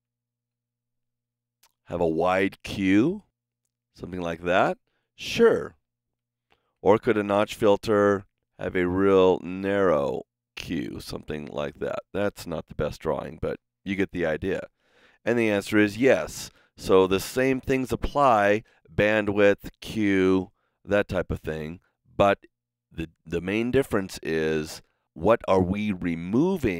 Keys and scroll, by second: 6.3 super+z.